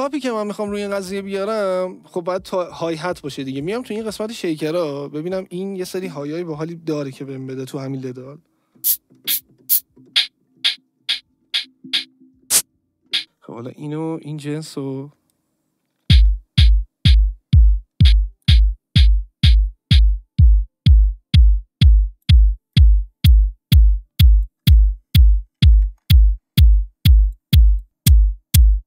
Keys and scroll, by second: 13.2 space, 16.0 space, 25.7 ctrl+a.